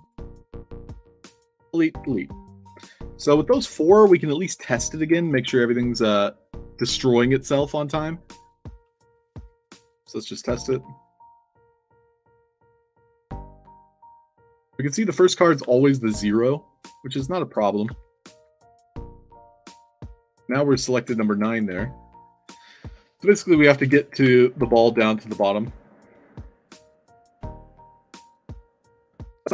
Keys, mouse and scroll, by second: 0.0 click, 1.8 click, 2.4 scroll up 2, 3.0 ctrl+s, 7.4 click, 8.2 click, 10.0-12.6 typing, 15.5 e, 17.7 e, 20.6 d, 21.7 e, 24.1 e, 27.3 e, 29.0 d.